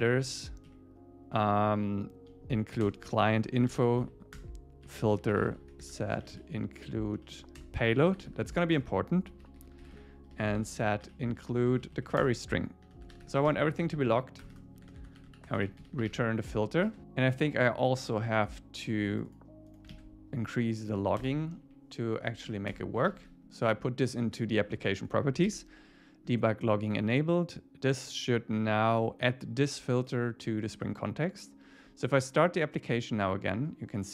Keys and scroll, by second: 0.7 Down, 2.8 Return, 4.3 Return, 7.2 Down, 7.6 Return, 8.5 Right, 8.8 Return, 11.7 Down, 12.2 Return, 13.5 Escape, 14.0 super+Right, 14.4 Return, 16.5 Escape, 16.9 super+s, 19.9 super+v, 20.8 Up, 22.4 super+Left, 23.1 super+s, 25.5 super+s.